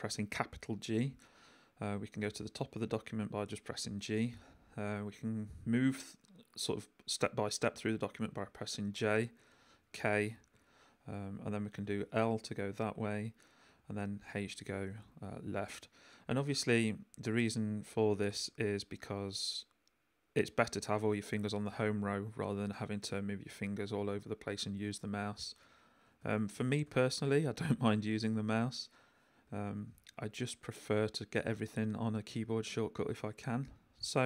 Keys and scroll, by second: 2.3 g, 8.0 j, 9.7 k, 13.7 h, 16.7 k, 17.1 j, 18.4 k, 19.0 j, 25.1-26.5 typing, 29.4 h, 29.9 l.